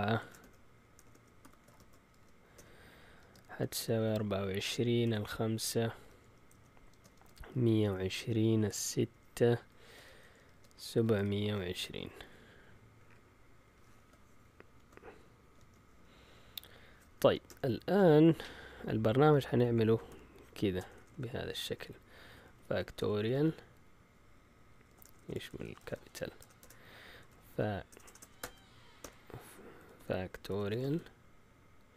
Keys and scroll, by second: 0.0-12.3 typing, 14.4-15.9 typing, 17.2 End, 17.4 Return, 17.8 Return, 19.0-31.9 typing.